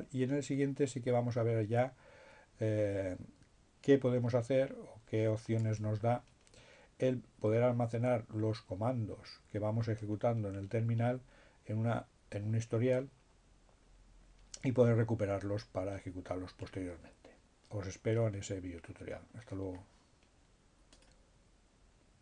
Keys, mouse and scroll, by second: 20.9 click.